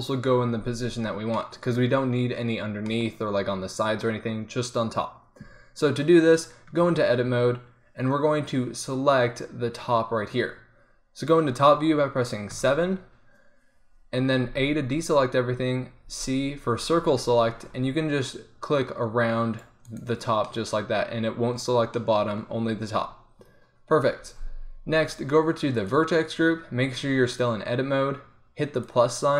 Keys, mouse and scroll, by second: 0.9 middle click, 6.1-10.0 middle drag, 6.7 Tab, 12.6 KP_7, 14.6-16.2 drag, 14.6 a, 16.2 c, 24.1 Tab, 26.9 Tab.